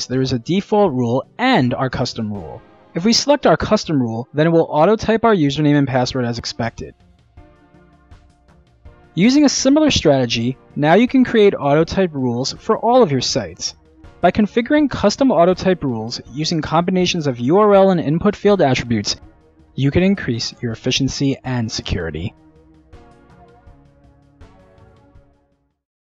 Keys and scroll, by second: 4.4 Return, 4.4-5.4 typing, 4.5 Tab.